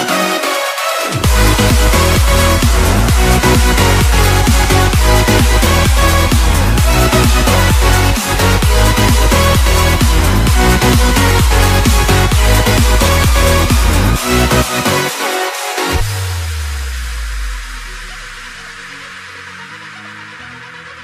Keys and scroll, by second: 6.3 space, 8.8 ctrl+z, 16.8 ctrl+-, 17.8 space, 20.4 ctrl+=.